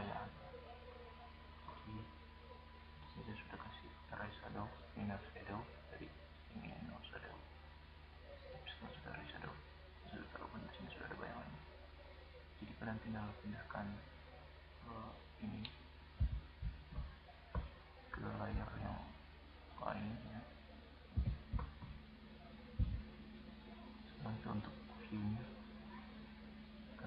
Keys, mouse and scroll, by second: 1.4-3.5 middle drag, 4.9-7.6 drag, 10.2 click, 10.7-11.8 right drag, 12.6-13.3 drag, 14.4 click, 15.2 click, 16.1-16.8 right drag, 16.1 m, 20.1 click, 21.1 right click, 21.1 m, 21.4-21.9 drag.